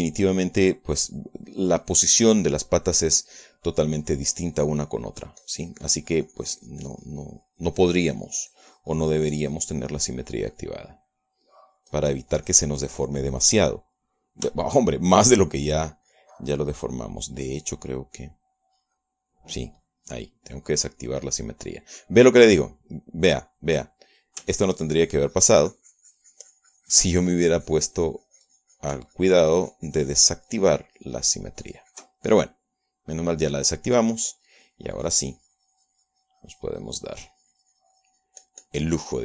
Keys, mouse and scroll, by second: 0.7 click, 1.9-4.3 drag, 4.7-15.7 drag, 15.7 shift+middle click, 16.4 click, 17.1-18.2 drag, 19.7 click, 20.9 click, 21.5-25.5 middle drag, 25.5-33.2 ctrl+drag, 33.3-34.8 ctrl+middle drag, 35.0-39.2 drag.